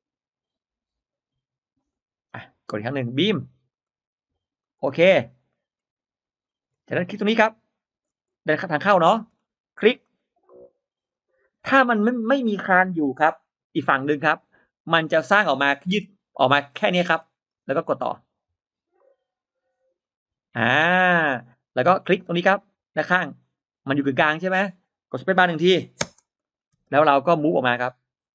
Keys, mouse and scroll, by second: 1.7 click, 2.5 click, 3.6 click, 4.5 click, 5.0 scroll down 1, 5.3-5.6 scroll up 1, 5.4 middle click, 5.6-5.9 scroll down 1, 6.5-6.8 scroll up 1, 7.9 scroll down 1, 8.6 middle click, 8.7-9.5 scroll up 3, 9.9 click, 11.0 click, 14.3-14.6 scroll down 2, 15.0 middle click, 16.7 middle click, 16.9-17.9 scroll up 2, 18.5 click, 19.9 click, 20.5-21.1 scroll down 1, 21.5-22.1 scroll up 1, 23.3 click, 25.9 space, 26.3 middle click, 26.3-26.6 scroll up 1, 26.6 space, 26.7 drag, 27.1 middle click, 27.5 click, 28.0 middle click.